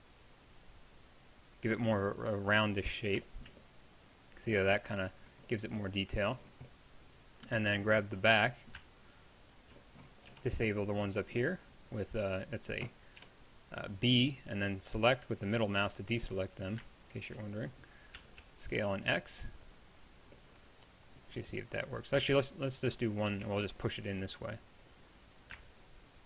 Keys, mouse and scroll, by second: 10.3-13.2 right drag, 10.3 b, 13.2 b, 14.7-16.3 middle drag, 18.2 s, 22.3 ctrl+z, 23.3 g.